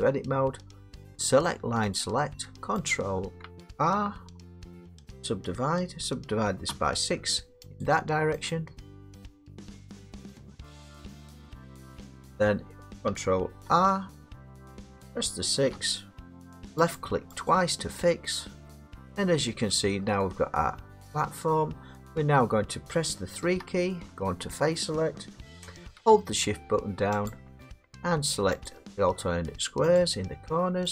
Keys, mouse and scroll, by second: 1.9 click, 2.9 click, 4.2 ctrl+r, 6.7 6, 7.8 click, 8.5 click, 10.0 click, 11.6 click, 12.4 middle click, 13.6 ctrl+r, 15.7 6, 17.0 click, 17.3 scroll, 17.5 click, 18.7 middle click, 19.7 middle click, 20.0 scroll, 21.5 middle click, 22.1-22.5 scroll up 5, 23.4 3, 27.3 shift+click, 28.7 shift+click, 29.9 shift+click.